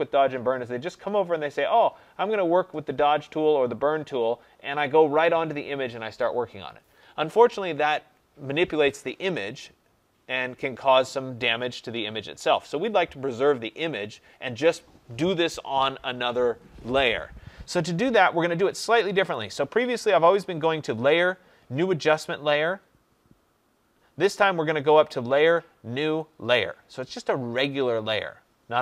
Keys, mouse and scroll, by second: 19.3-24.3 drag.